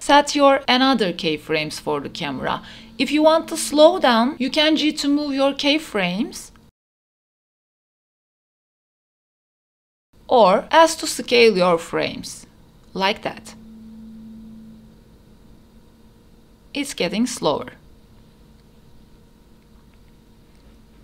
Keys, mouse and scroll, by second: 0.1 click, 0.5 space, 1.8 space, 2.6-3.6 drag, 4.6-7.4 drag, 7.7 space, 8.8 space, 9.0-9.5 drag, 9.7 a, 10.1 s, 15.5 space, 18.7 space, 19.8-21.0 drag.